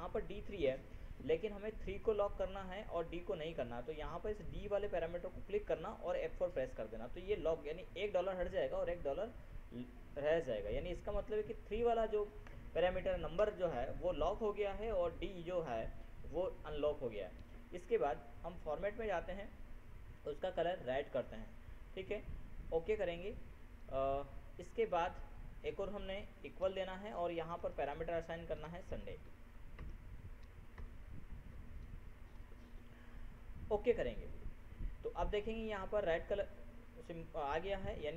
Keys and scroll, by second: 6.6 ctrl+F4, 28.9 ctrl+shift+s, 29.3 ctrl+u, 29.6 ctrl+m, 30.2 ctrl+BackSpace, 31.1 ctrl+n.